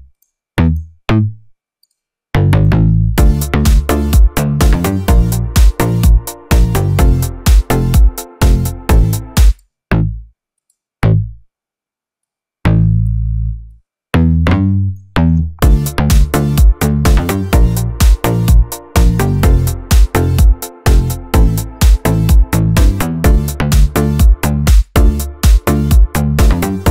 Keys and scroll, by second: 3.0 space, 9.3 space, 15.4 space, 24.5 space.